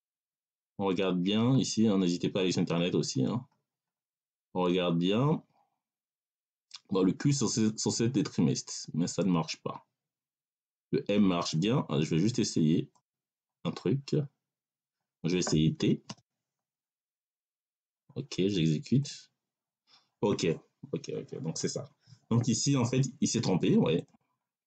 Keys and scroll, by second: 15.9 t.